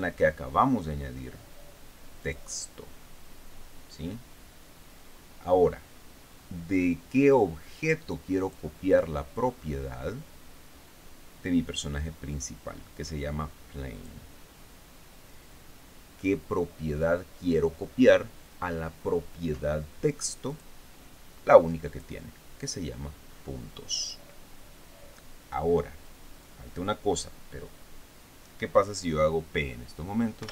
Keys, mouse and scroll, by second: 2.7 click, 8.8 click, 9.8-10.2 scroll down 1, 14.4 click, 21.0 click, 22.3 click.